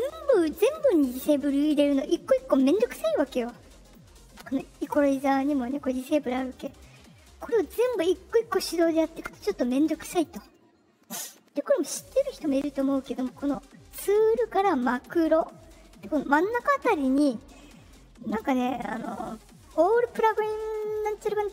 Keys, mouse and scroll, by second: 3.8 click, 5.0 click, 6.5 click, 7.5 click, 9.9 drag, 11.2-11.7 drag, 12.7 click, 14.0 click.